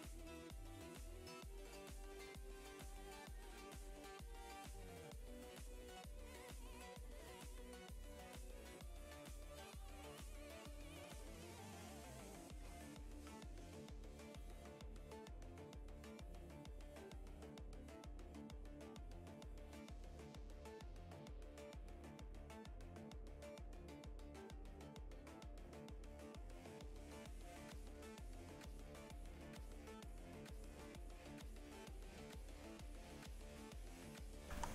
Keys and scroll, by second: 3.7 ctrl+z, 22.0 ctrl+z.